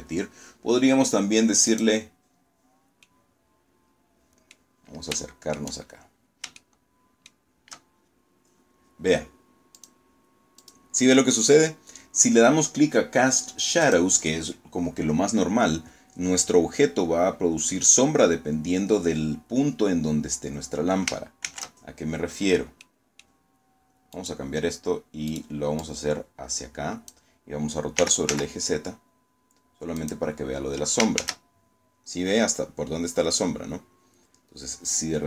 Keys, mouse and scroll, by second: 0.6 click, 1.4 scroll down 1, 1.9-3.6 middle drag, 4.0-4.7 shift+middle drag, 4.7-5.1 shift+scroll up 2, 5.5-6.3 shift+middle drag, 6.5-7.1 shift+scroll up 2, 8.7 click, 9.5 click, 12.7 click, 18.9 scroll down 2, 20.3 shift+z, 21.0 scroll down 2, 21.7 middle click, 22.0-22.3 scroll down 2, 23.0 right click, 24.2 right click, 24.7-26.2 drag, 26.9 r, 27.2 z, 28.9 click, 30.1 shift+z, 34.7 g.